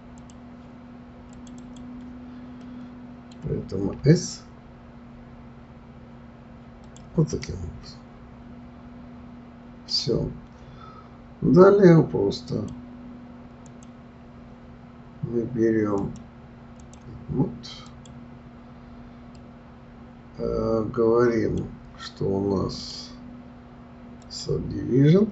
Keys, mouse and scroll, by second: 0.2 click, 1.3 click, 1.6 click, 2.6-4.0 middle drag, 4.0 s, 7.3 click, 7.9-10.9 middle drag, 12.5 click, 13.7 click, 16.0-18.0 drag, 19.3-22.7 middle drag, 22.7-25.3 drag.